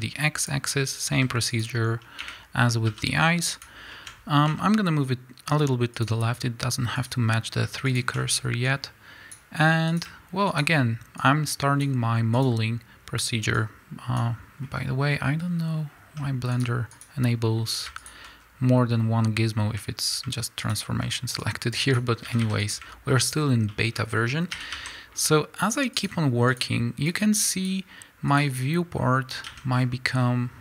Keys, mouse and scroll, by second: 0.5 click, 0.6 scroll up 1, 1.1 s, 1.6 click, 2.2 1, 2.9 s, 3.6 shift+click, 3.9-6.0 shift+middle drag, 4.1-4.5 scroll up 1, 4.5 g, 6.0 click, 7.0 click, 7.9 shift+click, 8.7-10.0 drag, 10.5 shift+click, 11.2-12.4 drag, 13.5-17.1 drag, 14.6-15.0 scroll up 2, 15.0-16.5 scroll down 2, 17.9 shift+click, 18.4-19.0 scroll down 2, 19.0-20.6 scroll up 2, 20.6 shift+click, 21.4-22.7 drag, 22.2 a, 23.2 shift+click, 23.7-26.0 shift+middle drag, 24.5 e, 26.5 click, 27.1-28.4 drag, 28.9 scroll up 1, 29.5 a, 29.7 scroll down 1, 30.2 click.